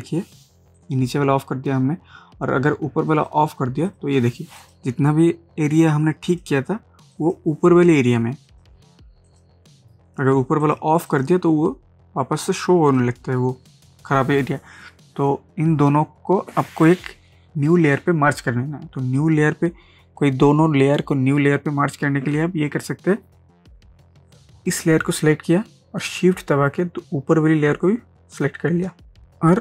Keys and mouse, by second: 0.8 ctrl+j, 2.6 click, 3.1 click, 24.8 click, 28.3 shift+click.